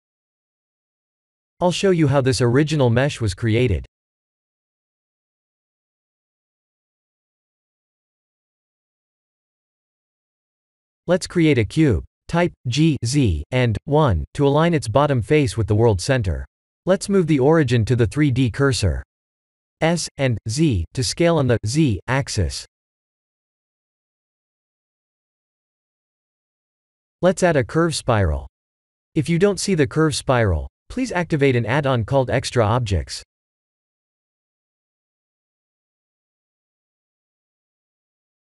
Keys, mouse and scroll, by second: 0.0 click, 1.0 KP_Decimal, 1.9 middle click, 8.2 KP_1, 10.2 click, 10.7 click, 11.0 shift+a, 13.2 g, 16.5 click, 19.1 s, 24.8 middle click, 25.6 middle click, 26.1 click, 27.0 shift+a.